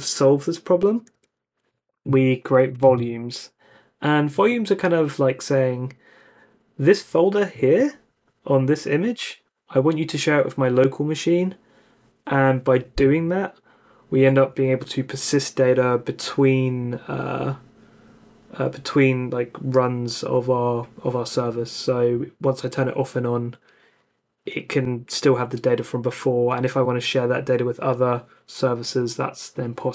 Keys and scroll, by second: 1.1 u.